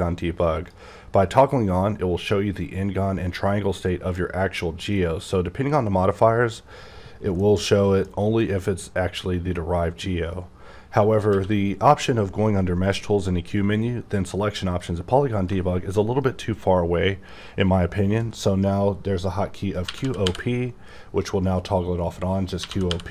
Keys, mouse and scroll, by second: 3.7 middle click, 7.3 middle click, 11.3 q, 14.8 click, 19.9-20.2 typing, 22.6 typing.